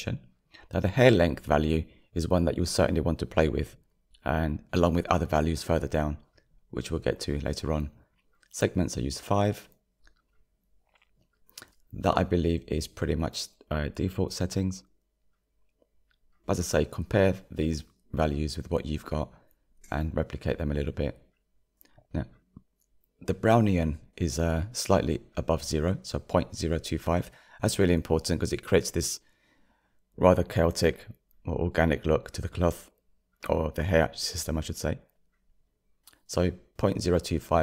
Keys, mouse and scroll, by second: 27.7-28.3 scroll up 6, 28.7-29.1 scroll up 3, 30.1-37.6 shift+middle drag.